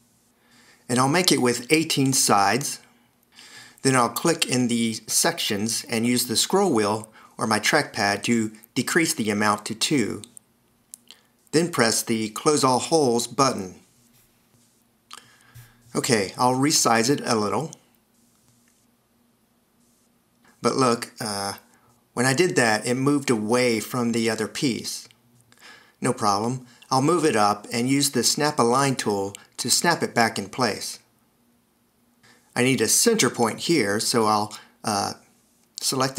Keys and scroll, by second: 13.0 a, 35.2 d.